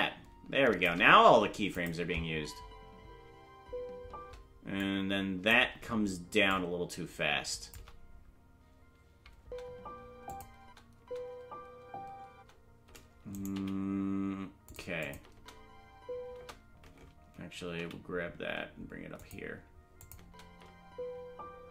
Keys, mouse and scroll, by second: 1.7 click, 1.9 space, 4.8 click, 4.8 space, 6.5 click, 9.4 space, 10.3 click, 10.6 space, 11.5 space, 13.3 right click, 13.3 space, 13.5 g, 15.0 click, 15.3 space, 17.7 g, 17.7 space, 20.0 click, 20.2 space.